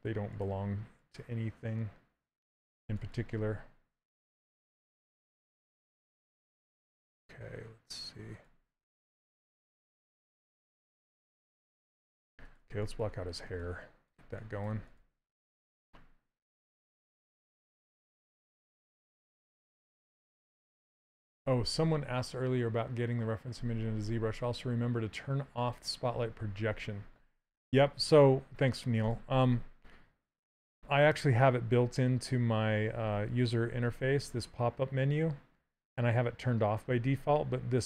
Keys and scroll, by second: 30.4 2.